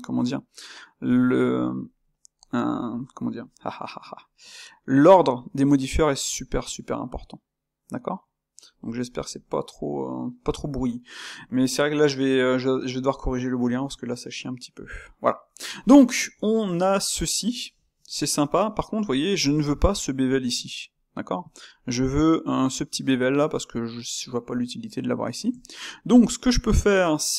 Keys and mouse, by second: 9.9-26.6 middle drag, 26.6 click, 27.0-27.3 middle drag.